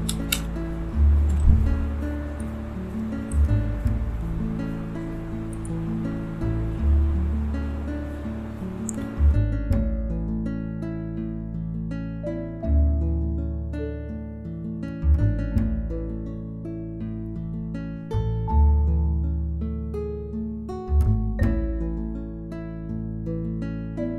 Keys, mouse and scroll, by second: 0.0-0.3 typing, 1.8-4.9 drag, 8.9 click, 8.9-13.8 drag, 17.5 click, 18.4 right click, 19.0 click, 19.3 right click, 20.3 click, 20.8 right click, 21.4 click, 21.5 right click, 22.4 click, 23.2 right click, 24.0 click.